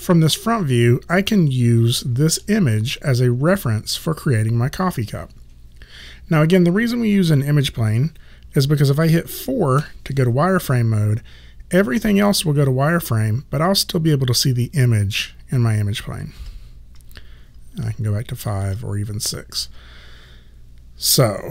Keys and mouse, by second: 9.8 4, 16.4 4, 17.9 5, 18.7 6, 19.7 5.